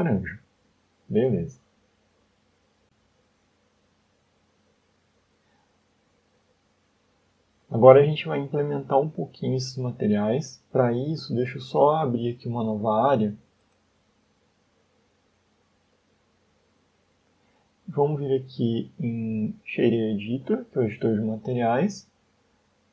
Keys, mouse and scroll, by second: 0.8 click, 1.7 Tab, 2.1 middle click, 3.2 click, 3.6 scroll down 1, 4.0 middle click, 5.4 shift+middle click, 6.1 middle click, 7.0 shift+middle click, 12.4 right click, 15.5 click, 17.4 click, 20.4 n, 21.2 middle click.